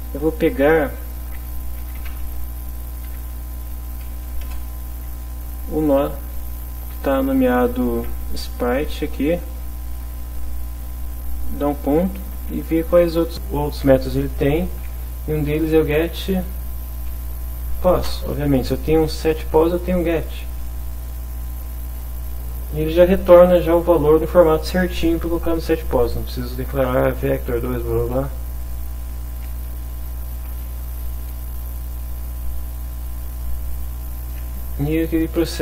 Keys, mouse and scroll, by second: 1.7-3.1 typing, 4.2 Down, 4.4 Return, 6.9 shift+', 8.0 shift+s, 9.0 Return, 9.9 shift+0, 10.8 ., 12.7 g, 12.9 e, 14.2 t, 15.3 shift+-, 16.3 p, 17.3 Down, 18.0 Return, 20.1 Left, 21.7 Left, 28.6 click, 33.0 Return.